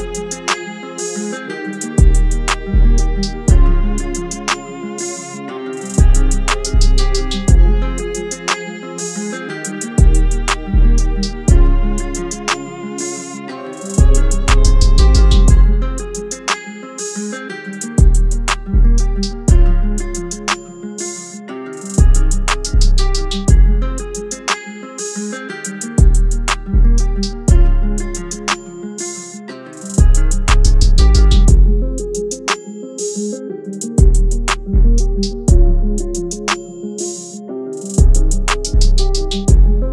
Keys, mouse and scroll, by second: 1.0-3.4 drag, 5.9-13.1 drag, 14.2 shift+i, 14.2 shift+click, 15.0 v, 16.5 click, 21.6 i, 22.4 shift+click, 23.1 v, 24.2 click, 27.0 click, 27.1 click, 31.7 Tab, 33.3-35.1 drag, 38.8 Tab.